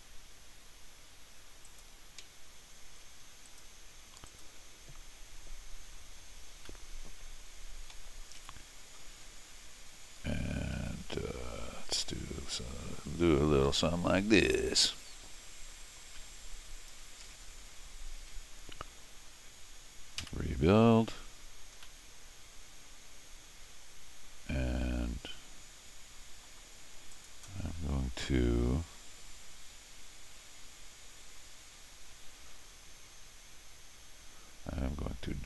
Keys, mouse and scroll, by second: 1.7 click, 3.5 click, 4.3 click, 6.7-7.9 middle drag, 8.4 n, 9.2 scroll up 2, 10.8 ctrl+r, 14.9-16.9 drag, 20.2 r, 21.8-26.4 middle drag, 27.1 click.